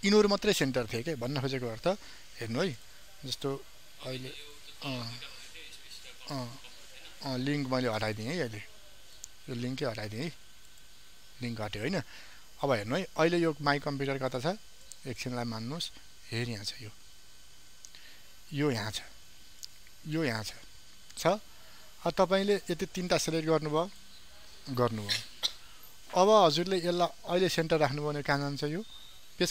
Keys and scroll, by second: 2.3 ctrl+d.